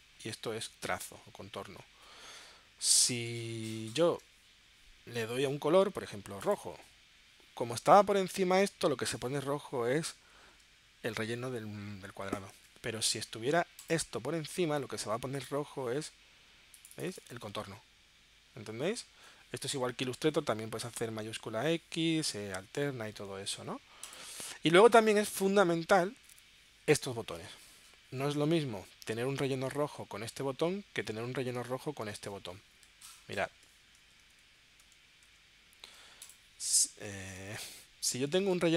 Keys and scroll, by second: 12.3 super+z, 21.2 shift+x, 34.5 super+z, 38.0 super+z.